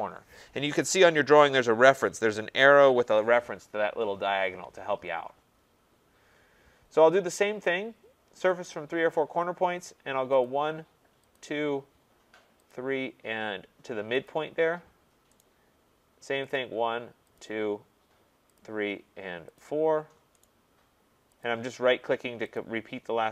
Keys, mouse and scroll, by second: 5.5-8.7 scroll, 8.7 click, 9.2 middle click, 9.2 middle click, 10.5 click, 11.3 click, 12.7 click, 14.3 click, 15.4 right click, 16.6 click, 17.4 click, 18.6 click, 19.6 click, 20.4 right click, 21.4 click, 22.6 click.